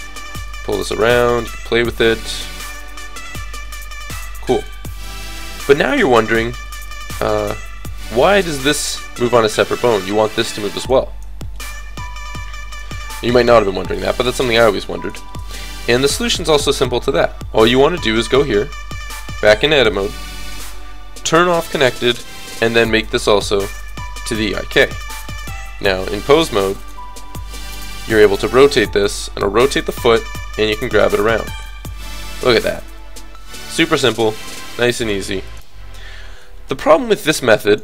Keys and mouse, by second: 0.4-1.9 middle drag, 3.9 r, 4.5 click, 5.3 KP_3, 7.0 click, 8.1 r, 11.3 click, 12.8 a, 12.9 a, 14.1 alt+r, 14.3 alt+g, 18.2-19.2 middle drag, 19.9-24.0 drag, 24.8 click, 26.4-27.5 drag, 26.4 right click, 27.5 KP_3, 28.3 r, 30.1 g, 31.2 r, 31.7 g, 34.1 r, 34.5 g, 35.2 r, 36.2-37.8 drag, 37.1 r.